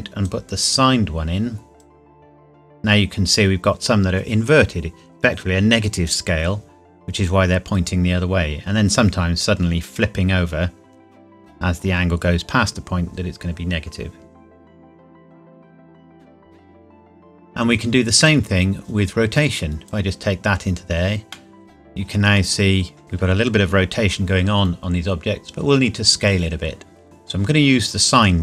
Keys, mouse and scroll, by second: 7.0 scroll down 1, 12.1 scroll up 1, 16.3 click, 21.4 middle click.